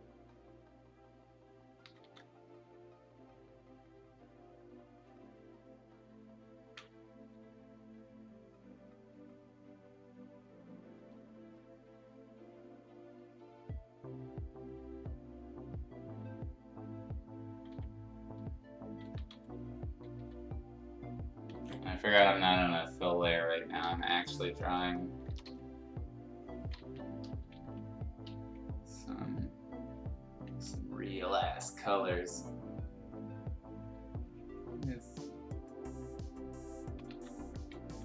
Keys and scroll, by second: 1.8 ctrl+z, 2.0 ctrl+z, 17.7 x, 19.0 ctrl+z, 19.3 x, 20.1 e, 21.5 ctrl+z, 22.2-25.4 typing, 27.2 n, 27.6 b, 30.5 ctrl+z, 37.1 ctrl+z, 37.9 ].